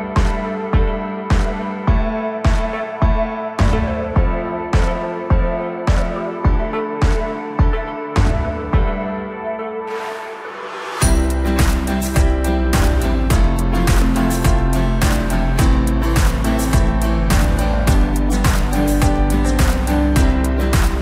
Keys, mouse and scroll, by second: 0.2-0.7 scroll down 2, 0.7 r, 3.1 Tab, 3.6 scroll up 2, 3.8 scroll down 2, 4.0-5.8 middle drag, 5.8 KP_1, 6.5-6.8 scroll up 1, 6.8 Tab, 7.8 2, 8.4 click, 8.6 click, 8.9-9.9 scroll down 1, 9.9 shift+d, 11.6 p, 12.2 Tab, 13.1 click, 13.4 scroll up 1, 13.7 scroll down 2, 14.0-15.3 middle drag, 15.3 KP_1, 15.9-17.2 scroll up 2, 17.2-17.6 drag, 17.6-18.5 middle drag, 18.5-19.1 scroll down 2, 19.1-19.9 scroll down 1, 19.9-21.0 drag.